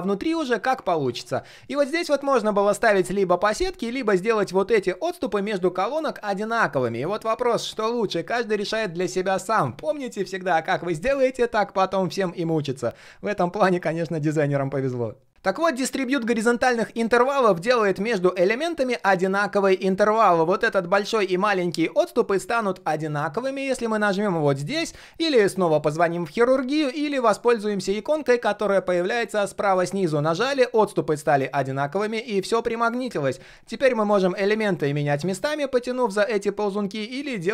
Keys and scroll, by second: 4.9 ctrl+shift+4.